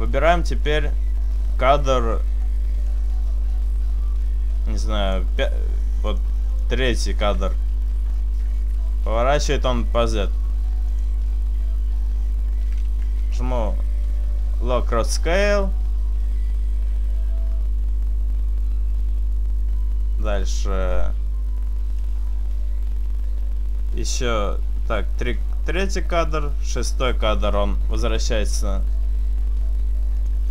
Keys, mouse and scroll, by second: 2.9 click, 6.1 click, 6.6 click, 8.6 r, 11.0 click, 13.3 i, 22.1 click, 27.1 r, 30.4 click.